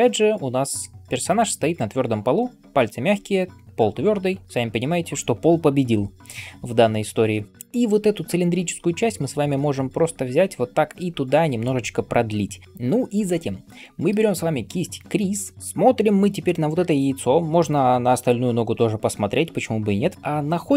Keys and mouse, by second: 2.0 [.